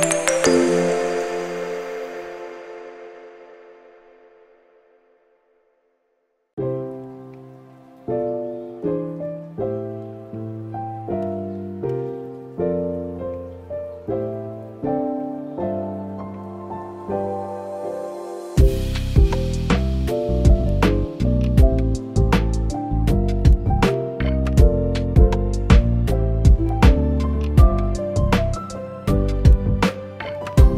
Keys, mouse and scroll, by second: 2.1 Tab, 2.8 middle click, 4.8 shift+middle click, 5.2 Tab, 6.9 click, 7.2 click, 8.5 shift+middle click, 9.2 r, 11.6 s, 13.6 middle click, 15.8 shift+middle click, 16.0 middle click, 17.0 middle click, 17.2 shift+middle click, 17.7 Tab, 18.8 click, 19.1 shift+middle click, 19.5 click, 19.8 scroll down 2, 20.0 middle click, 20.5 shift+middle click, 20.7 middle click, 21.2 click, 21.6 shift+click, 23.8 shift+middle click, 24.5 shift+click, 26.3 ctrl+l, 27.4 click, 27.7 shift+middle click, 28.1 middle click, 29.2 click, 29.3 middle click, 29.6-30.2 scroll up 4, 30.0 middle click.